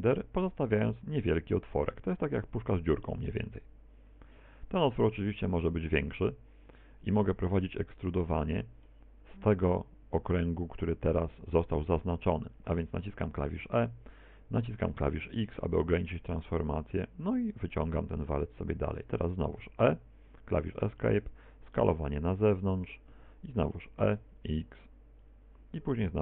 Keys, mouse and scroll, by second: 2.7 click, 3.1 middle click, 5.6 s, 7.2 click, 7.6 middle click, 8.5 middle click, 11.8 middle click, 13.5 e, 17.7 click, 17.7 shift+middle click, 19.7 e, 21.3 s, 22.9 click, 23.6 e, 25.5 click.